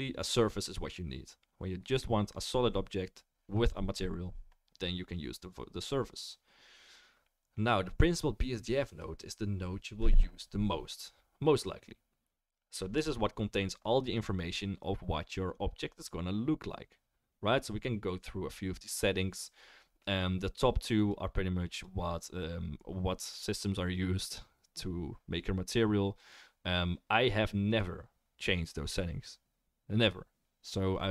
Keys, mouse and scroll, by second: 21.0 click, 23.3-26.3 drag, 26.7 click.